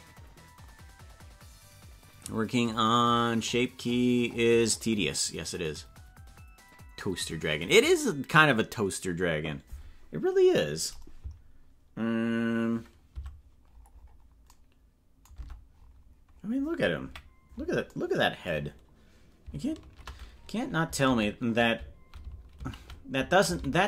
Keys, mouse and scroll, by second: 14.4 scroll down 10, 15.4 Tab, 15.7 scroll down 2, 17.0 KP_Decimal, 18.6 scroll up 4, 19.8 shift+`.